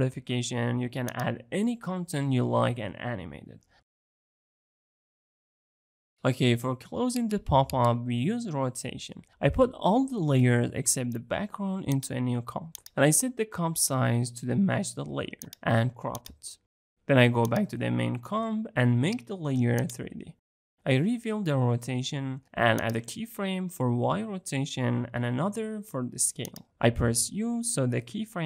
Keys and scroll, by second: 9.0 ctrl+shift+c.